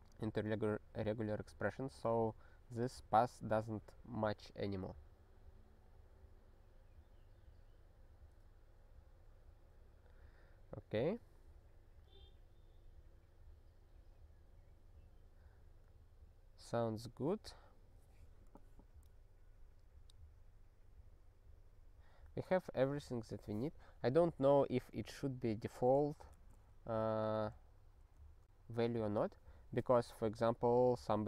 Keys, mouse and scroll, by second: 24.7 click, 27.0 ctrl+f, 27.2 ctrl+f, 27.5 ctrl+f, 28.0 ctrl+f.